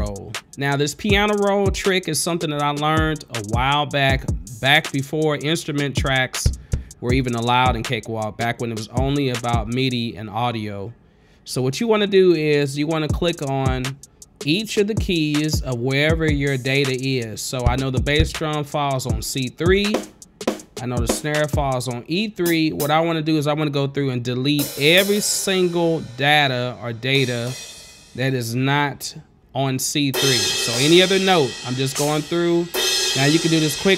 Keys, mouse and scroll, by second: 1.8 click, 5.5 scroll down 1, 6.7 click, 7.4 scroll up 1, 8.2 scroll up 1, 12.1 click, 14.1 click, 17.9 click, 18.4 click, 20.2 click, 20.7 click, 21.3 click, 22.7 click, 23.0 click, 23.9 middle click, 24.9 click, 25.3 click, 26.4 middle click, 27.4 click, 27.8 click, 28.5-29.4 scroll up 3, 30.4 click, 31.0 click, 32.2 click, 33.0 click.